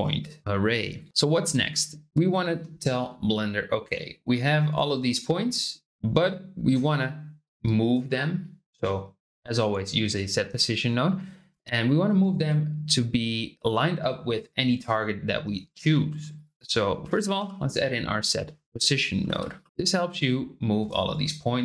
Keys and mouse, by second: 0.4 r, 1.1 shift+middle click, 1.6 click, 2.1 ctrl+g, 16.0 shift+a, 19.9-21.6 drag.